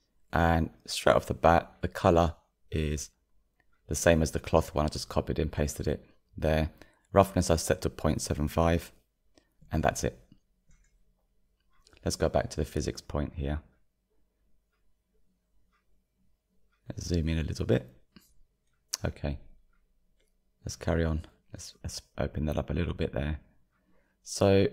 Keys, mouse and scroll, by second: 3.5-4.6 drag, 5.7 click, 12.5-15.0 middle drag, 15.0-16.4 drag, 16.4 scroll up 2, 17.0-22.3 shift+middle drag, 22.3-24.7 drag.